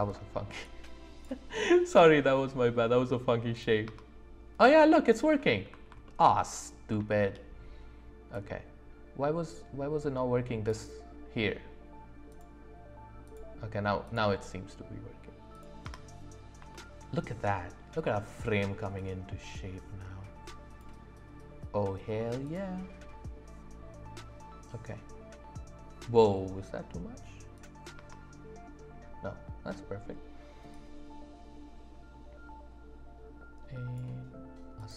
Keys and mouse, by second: 1.9 click, 3.5 click, 3.9 space, 4.6 click, 5.4 ctrl+z, 7.1 shift+middle click, 8.3 click, 12.3 click, 13.2 click, 14.0 click, 15.5 click, 15.8 space, 16.7 shift+click, 18.9 click, 22.4 click, 27.5 click, 27.9 space, 30.7 click, 34.8 click.